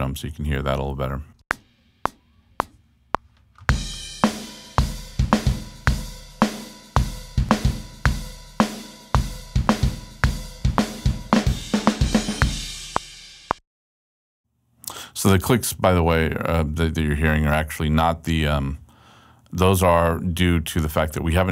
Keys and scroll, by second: 0.9 Return, 1.4 space, 2.4 x, 6.6 super+Left, 13.2 space.